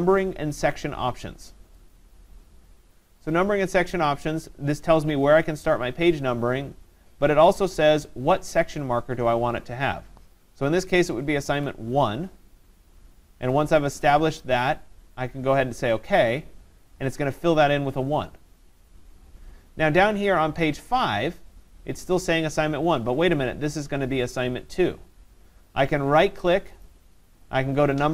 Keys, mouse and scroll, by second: 2.0-14.6 drag, 11.5 1, 16.2-20.6 drag, 26.9 right click.